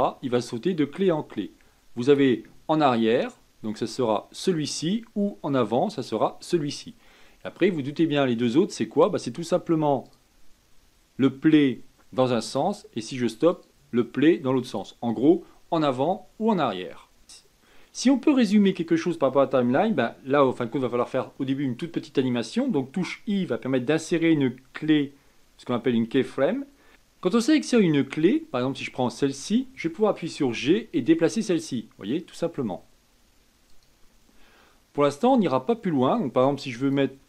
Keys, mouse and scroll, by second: 10.0-17.2 drag, 28.8 click, 30.4 g, 36.7 click.